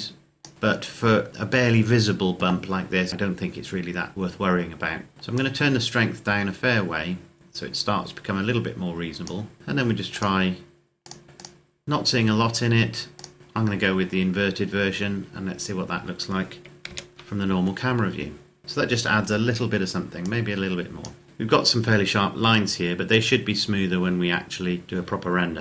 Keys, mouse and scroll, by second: 4.1-5.3 scroll up 1, 5.3 click, 14.3-15.8 scroll down 1, 16.6 KP_0, 18.0-18.6 scroll down 1, 20.3 click.